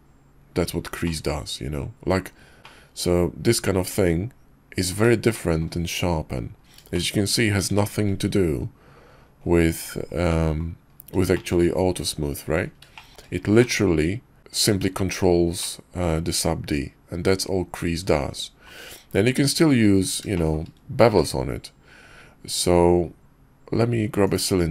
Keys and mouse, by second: 1.0 click, 1.2-2.2 middle drag, 2.6-4.9 middle drag, 5.1 shift+middle click, 6.9 shift+middle click, 7.7 shift+middle drag, 10.3 middle click, 11.3 shift+middle click, 12.6 middle click, 12.9 shift+middle click, 13.6-14.4 middle drag, 15.6-18.7 middle drag, 20.3 shift+middle click, 21.1 shift+a.